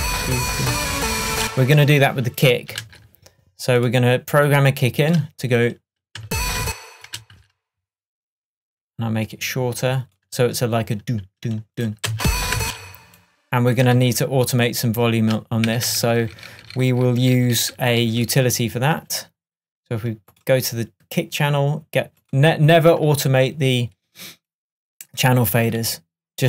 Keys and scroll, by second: 1.4 space, 2.9 super+c, 6.3 space, 7.2 super+space, 12.2 space, 14.1 super+d, 15.8 super+d.